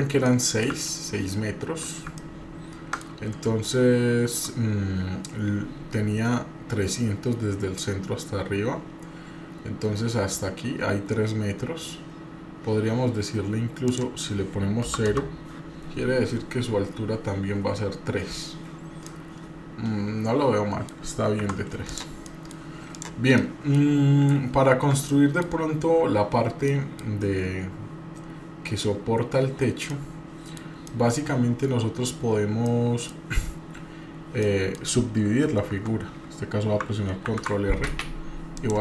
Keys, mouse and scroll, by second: 0.2-1.8 middle drag, 2.2 middle click, 3.7 shift+middle click, 13.9-15.5 drag, 19.1-20.9 middle drag, 21.4 Tab, 21.9 drag, 22.3 middle drag, 22.9 click, 23.3 middle click, 25.0-25.5 middle drag, 26.7 middle click, 29.9-30.6 middle drag, 30.8-32.1 middle drag, 32.6 middle click, 34.4 middle click, 35.7 Tab, 37.3 ctrl+r.